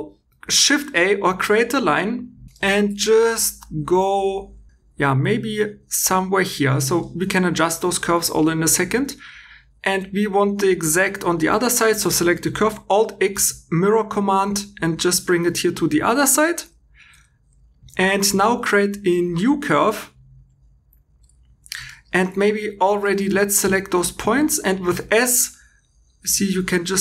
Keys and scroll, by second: 13.2 alt+x, 18.3 shift+a, 21.4 Escape, 22.3 1, 24.1 s.